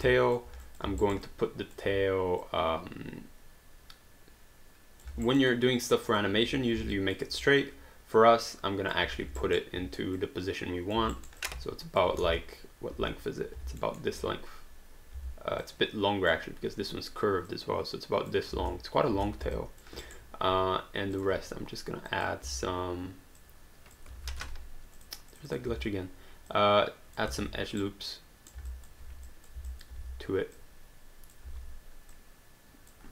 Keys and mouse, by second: 0.4 alt+click, 1.1 alt+right click, 1.3 alt+click, 2.4 click, 5.2 alt+right click, 5.5 alt+click, 6.9 alt+click, 7.6 click, 9.1 e, 9.4 alt+right click, 10.2 click, 11.2 alt+right click, 11.4 alt+click, 12.2 space, 13.8 alt+middle click, 15.1 w, 15.8 click, 17.6 click, 18.7 space, 19.6 alt+click, 20.1 alt+right click, 22.1 click, 24.5 q, 25.0 click, 25.7 w, 26.5 click, 27.4 ctrl+z, 27.8 right click, 28.8 alt+click, 29.3 click, 29.7 alt+click, 30.0 w, 30.6 click, 31.5 e, 32.2 click.